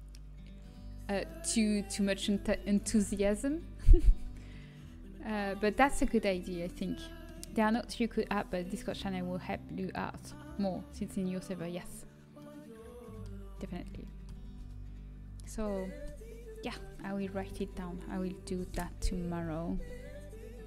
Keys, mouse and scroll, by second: 2.9 g, 12.1 middle click, 12.6 middle click, 12.8 middle click, 12.9 middle click, 14.4 a.